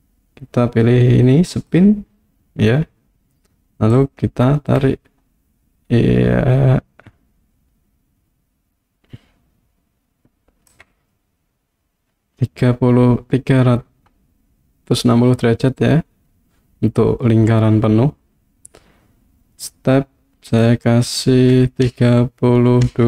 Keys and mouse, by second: 1.5 click, 3.9-10.7 drag, 20.5-23.0 drag.